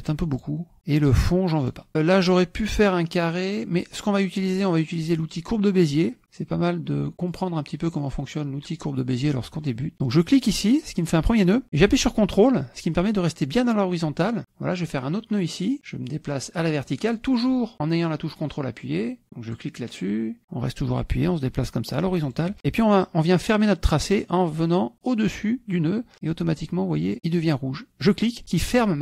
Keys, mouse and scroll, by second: 0.4 click, 1.6 click, 7.3 click, 10.4 click, 19.4 ctrl+click, 22.2 ctrl+click, 28.1 ctrl+click.